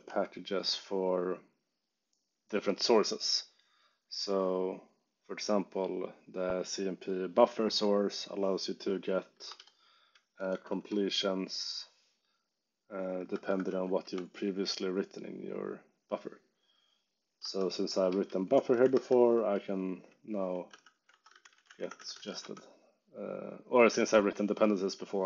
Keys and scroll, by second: 0.0-0.5 typing, 9.4 Escape, 9.5-11.0 typing, 12.9-14.2 typing, 17.3 Escape, 17.4-19.5 typing, 20.6-22.7 typing, 23.7 Escape, 23.9-25.2 typing.